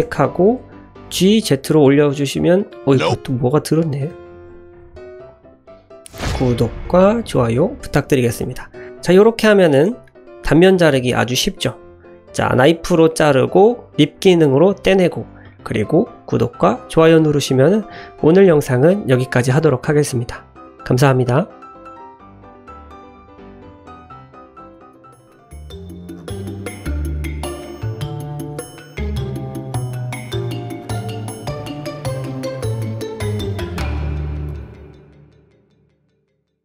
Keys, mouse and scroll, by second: 0.0 l, 1.0 g, 1.2 z, 3.1 shift+click, 4.1 l, 4.9 g, 5.0 z, 5.7 click, 8.8 shift+Tab, 9.0-9.5 shift+drag, 9.7 click, 10.0 middle click, 10.3-10.6 middle drag, 10.8 shift+middle drag, 12.1 middle drag, 15.5 shift+middle drag, 15.8-17.1 middle drag.